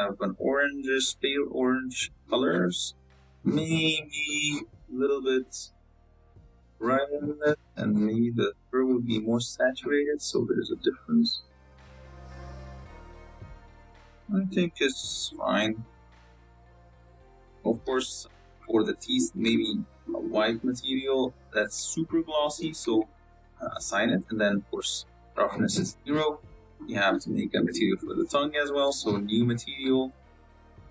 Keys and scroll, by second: 2.4 Tab, 2.8 z, 16.8 z, 18.0 Tab, 18.4 a, 19.7 l, 23.2 e, 26.9 a, 28.3 l.